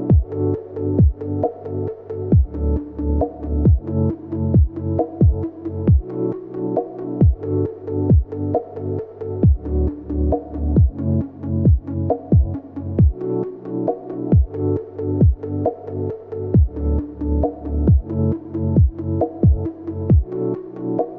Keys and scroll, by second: 0.8 ctrl+shift+[, 1.3 v, 3.9 i, 4.2 v, 4.6 i, 5.1 v, 8.1 i, 9.0 v, 9.6 Return, 10.4 p, 13.8 ctrl+z, 16.3 v, 16.3 a, 17.5 v, 18.1 a, 18.8 v, 20.6 p.